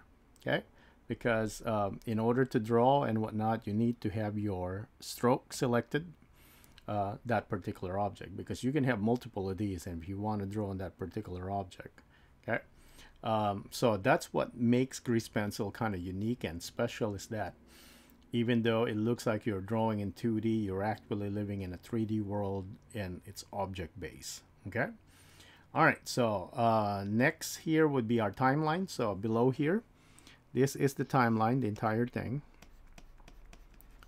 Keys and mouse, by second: 31.7 typing, 31.8 click, 33.8 click.